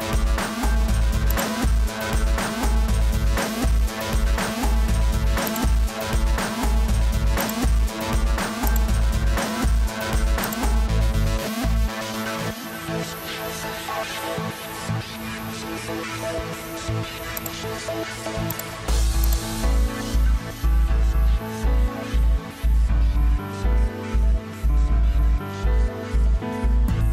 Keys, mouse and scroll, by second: 9.8 Escape, 21.7 Return, 22.7 Escape.